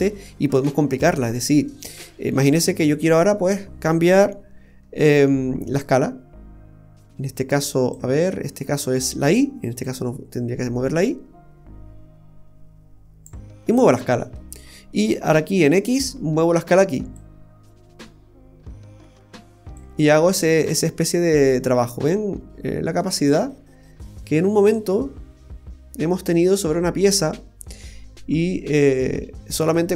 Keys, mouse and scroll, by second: 1.3-1.7 scroll up 1, 1.7 middle click, 2.9-3.5 scroll up 6, 3.5 middle click, 4.1-5.0 scroll up 7, 5.8 click, 5.8-6.1 scroll up 2, 9.8 click, 13.6-14.1 scroll down 2, 13.9 middle click, 14.6 scroll down 2, 14.9 middle click, 17.2 click, 20.2-20.8 scroll up 3, 20.6 middle click.